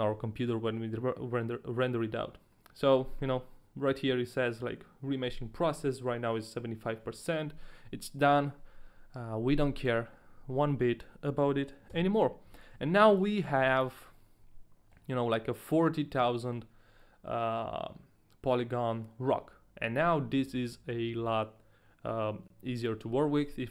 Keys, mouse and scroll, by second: 9.2 a, 9.8 right click, 11.9-13.7 typing, 13.2 right click, 13.7 right click, 14.2 middle click, 17.0 middle click, 23.4 Tab.